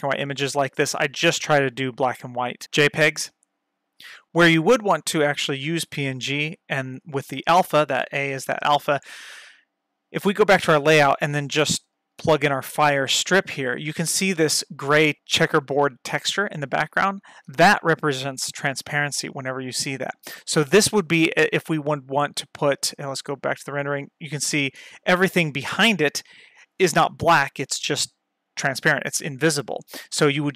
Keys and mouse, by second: 4.7-5.9 drag, 6.8 click, 10.2 click, 11.9 ctrl+shift+click.